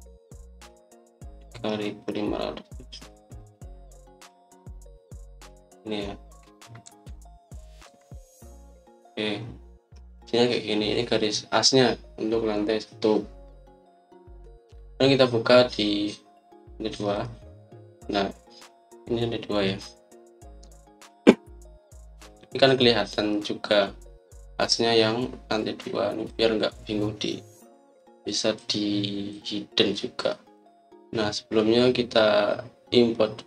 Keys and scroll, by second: 7.8 Escape, 8.8 Escape.